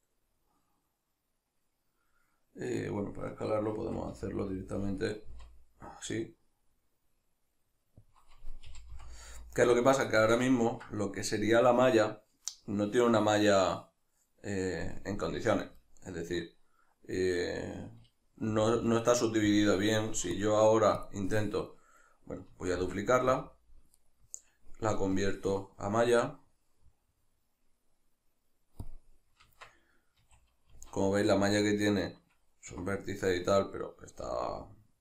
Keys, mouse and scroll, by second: 8.1 click, 8.7 g, 9.9 right click, 10.1-19.6 shift+middle drag, 18.5 g, 19.6 click, 22.7 shift+d, 23.4 click, 24.0 right click, 25.2-35.0 drag.